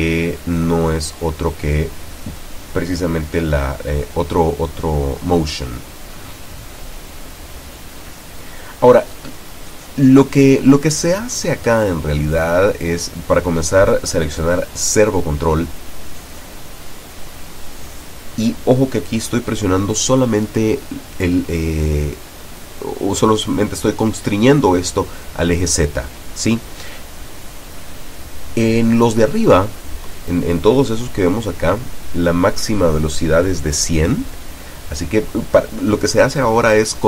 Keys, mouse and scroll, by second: 2.0-2.9 drag, 3.2 click, 6.0-6.9 drag, 7.6 click, 13.0 click, 14.0 click, 15.3-16.9 drag, 19.3 click, 20.4 click, 23.6 click, 24.4 click, 30.5 click, 36.7 click.